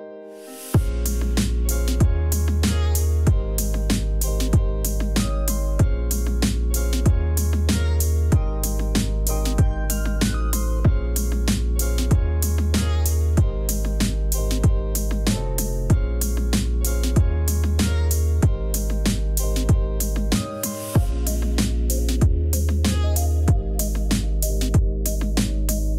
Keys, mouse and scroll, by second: 1.3 Escape, 1.6 v, 2.4 d, 5.6 Return, 6.3 Return, 6.7 Return, 8.0 Return, 9.3 ctrl+0, 14.1 Escape, 14.8 Escape, 15.0 b, 15.5 Escape, 16.0 v, 18.2 ctrl+-, 22.8 ctrl+z, 24.6 Return, 24.7 [, 24.9 Return, 25.0 [, 25.1 space, 25.2 Return.